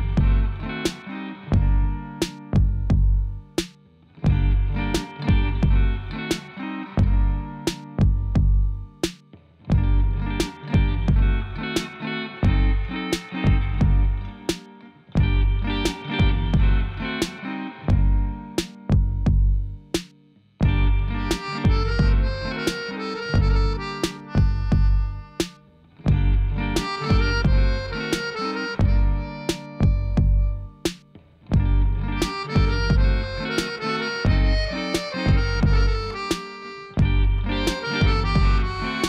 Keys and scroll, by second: 5.3 Tab, 6.0 alt+a, 10.8 shift+d, 11.0 y, 25.4 2, 25.5 Return, 37.9 shift+d, 38.0 y.